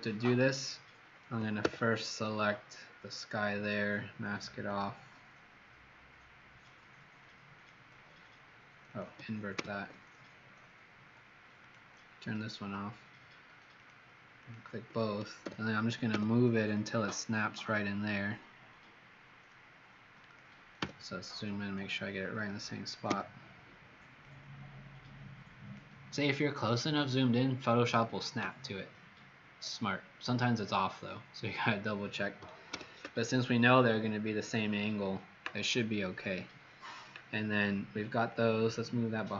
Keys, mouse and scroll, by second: 1.6 w, 2.1 click, 3.5 click, 9.5 ctrl+i, 11.5 click, 14.3 shift+click, 15.4 b, 16.0 v, 20.7 z, 21.2 click, 23.0 v, 24.2 click, 32.6 ctrl+0, 38.2 click.